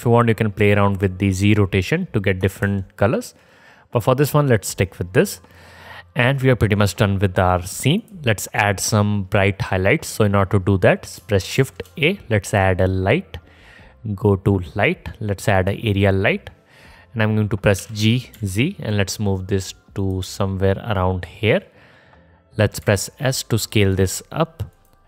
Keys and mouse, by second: 2.9 ctrl+z, 7.5-8.3 drag, 7.5-8.3 middle drag, 7.5-8.3 right drag, 11.8 shift+a, 18.0 g, 21.3 middle click, 21.3-25.0 drag, 23.0 s.